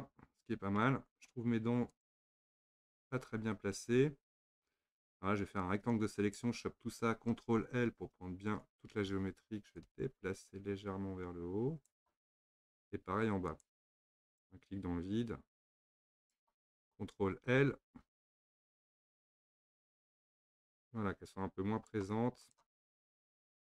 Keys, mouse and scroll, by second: 1.0-2.0 scroll up 2, 2.0 click, 3.3 Tab, 5.6 click, 8.8 ctrl+l, 9.8 click, 13.5 click, 14.3 click, 15.6 drag, 18.0 ctrl+l, 19.1 click, 22.4 click, 22.9-23.2 scroll down 1, 23.2-23.7 middle drag.